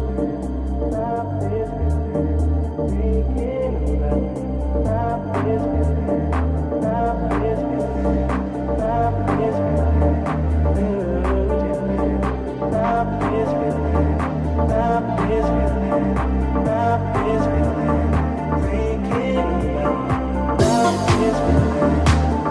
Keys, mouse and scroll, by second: 0.3-8.9 shift+drag, 1.3 shift+right click, 1.9 shift+right click, 2.6 ctrl+z, 3.3 shift+middle click, 3.3 shift+right click, 4.3 r, 9.0-15.5 drag, 12.1 right click, 13.1 shift+s, 15.0 ctrl+z, 20.8 Tab, 21.9 ctrl+Tab.